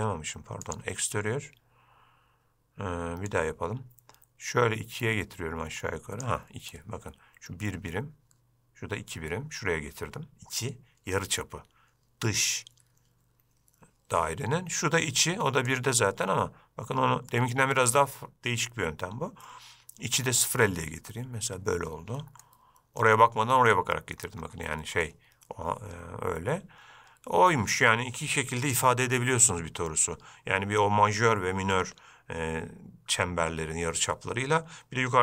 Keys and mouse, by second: 3.6-6.5 drag, 16.0-21.7 drag, 22.6-23.9 middle drag, 25.2-28.0 middle drag.